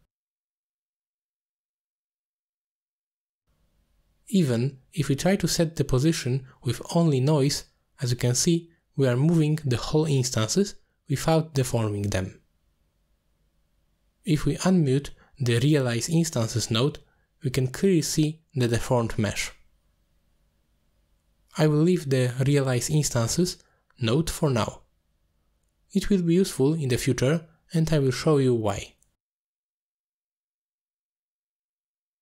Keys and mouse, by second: 0.0 middle click, 1.0-2.7 shift+drag, 3.2 middle click, 4.4 m, 4.8 middle click, 6.5-6.9 drag, 7.3 x, 7.8 middle click, 8.5-9.5 drag, 10.5 click, 11.7 middle drag, 12.6 middle drag, 13.1 shift+middle drag, 13.5 middle drag, 14.4 click, 16.3 middle click, 17.2 click, 18.1 m, 20.1-21.0 middle drag, 22.1 middle click, 22.7 middle drag, 23.6 drag, 24.4 x, 25.2 alt+shift+click, 25.7 click, 26.3 drag, 27.1 alt+shift+click, 28.2-29.0 drag, 29.6 ctrl+click, 30.9 middle drag, 31.4 shift+middle drag, 31.8 middle drag.